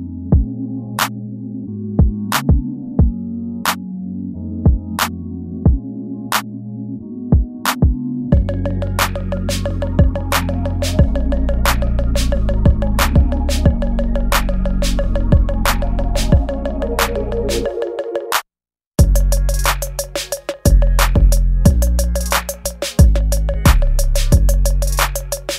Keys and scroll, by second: 0.7 ctrl+z, 2.0 ctrl+z, 2.6 space, 3.0 ctrl+z, 3.7 ctrl+z, 5.1 space, 8.5 space, 9.3 space, 10.9 space, 12.7 ctrl+z, 13.4 space, 16.1 space, 16.7 space, 16.8 ctrl+z, 17.8 space, 18.1 ctrl+z, 24.2 ctrl+s, 25.2 space.